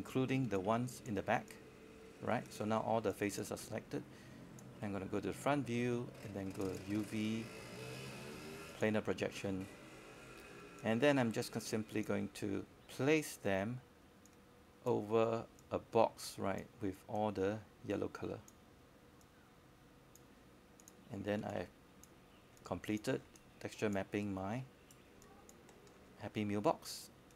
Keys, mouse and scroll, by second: 6.3-6.7 scroll up 1, 6.7-11.0 drag, 12.5-13.0 scroll down 1, 20.3 scroll down 1, 20.3 space, 20.4-21.9 drag, 23.4 right click, 24.7 click.